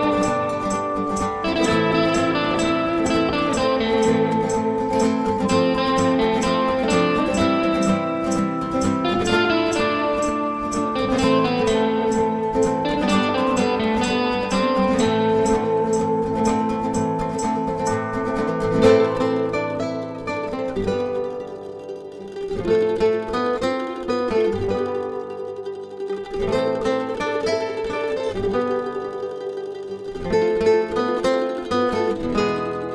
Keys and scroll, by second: 1.8 Page_Down, 16.3 Delete, 29.5-30.0 typing.